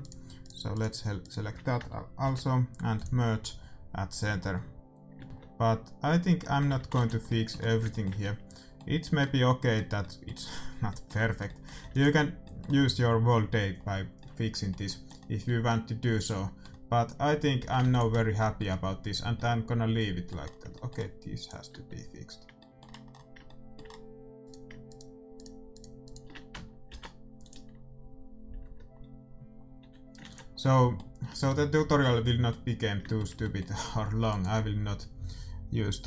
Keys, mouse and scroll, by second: 2.2 alt+m, 5.2-7.5 middle drag, 5.7 Tab, 6.6 a, 6.9 ctrl+s, 11.8 ctrl+s, 13.7-23.1 middle drag, 17.1 a, 17.6 a, 17.8 ctrl+s, 21.7-23.2 right drag, 22.2 Tab, 24.5-29.1 right drag, 26.9 alt+m, 29.1 Tab, 29.7 a, 30.2 ctrl+s, 30.5-31.8 middle drag, 34.5-36.0 right drag.